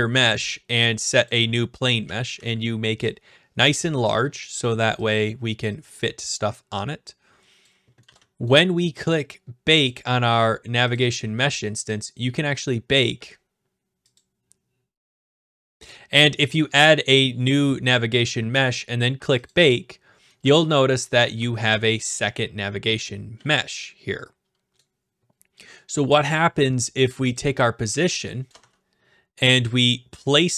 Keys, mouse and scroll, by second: 1.3-2.3 drag, 2.1-2.4 typing, 3.8-4.9 drag, 5.2-6.3 drag, 7.6 click, 7.8-8.7 typing, 8.5 right click, 9.9 click, 11.9 click, 14.2 click, 16.5 click, 18.0 click, 19.5 click, 20.2-21.0 typing, 23.7 s, 24.2 s, 24.8 right click, 27.4 click, 27.9 e, 28.6 w, 28.9 right click.